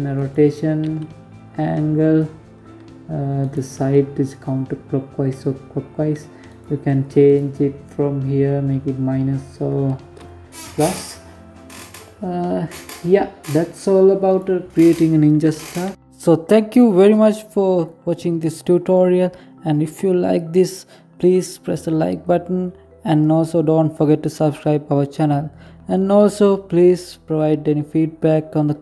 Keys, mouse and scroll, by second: 4.9 right click, 5.6 right click, 6.2-7.6 scroll down 5, 7.6 scroll up 3, 8.8-9.9 scroll down 2, 11.4-11.9 scroll up 5, 12.6 right click, 14.4 g.